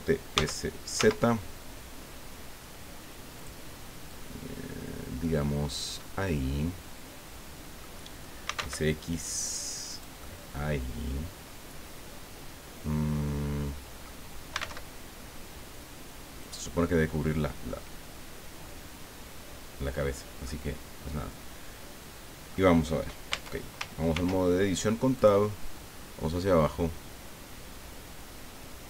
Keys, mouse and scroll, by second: 0.3 s, 1.0 z, 3.4 click, 4.1-5.9 drag, 6.0-8.0 middle drag, 8.4 s, 8.5 x, 9.9-14.2 drag, 12.2-14.2 middle drag, 14.5 s, 14.6 x, 16.4 click, 20.4-22.7 drag, 23.3 Tab, 24.1 ctrl+r, 25.2 click.